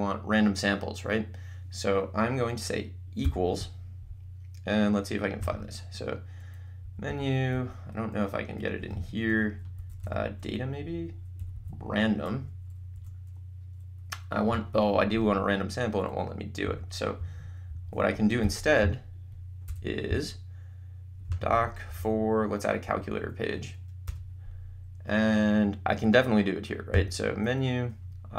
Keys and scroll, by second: 3.3 =, 5.6 Menu, 6.9 Down, 7.7 Right, 8.9 Left, 9.8 Up, 10.2 Right, 11.6 Down, 12.5 Up, 13.2 Right, 16.8 Escape, 19.6 BackSpace, 22.1 4, 23.0 Down, 24.1 Return, 26.9 Menu.